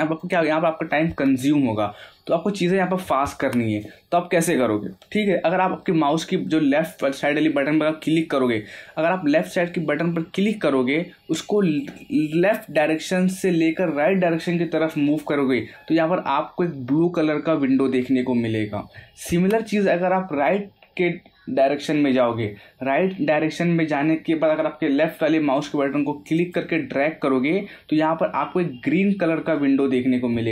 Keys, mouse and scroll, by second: 10.3 click, 26.4 click.